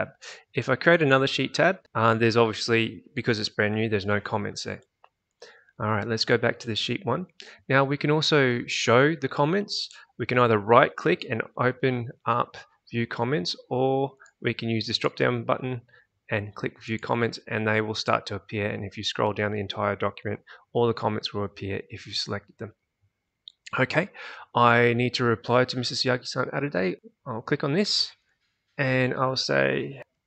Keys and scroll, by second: 30.0-30.2 typing.